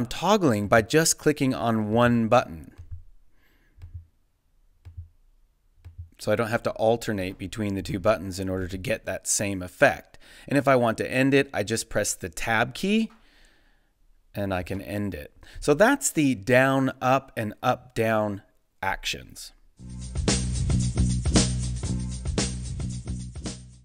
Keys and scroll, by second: 12.5 Tab, 14.6 space.